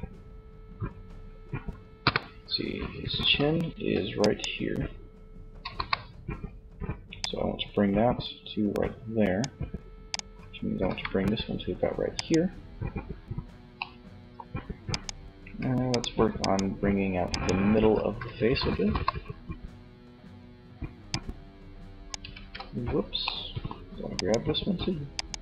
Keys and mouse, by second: 1.0 KP_1, 2.3 z, 2.9 z, 4.8 KP_3, 10.0 g, 17.7 KP_3, 21.6 ctrl+z, 25.3 KP_3.